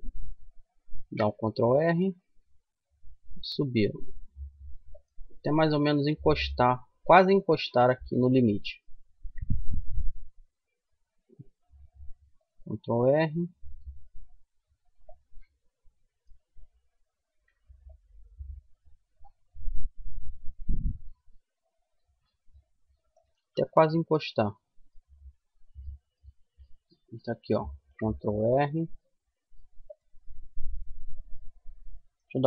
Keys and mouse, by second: 0.2 ctrl+r, 5.2-6.4 middle drag, 6.7-8.3 middle drag, 8.3 ctrl+r, 14.9-16.5 middle drag, 16.5 ctrl+r, 22.8-25.0 middle drag, 26.9 ctrl+r, 29.7 middle click, 31.9 ctrl+z.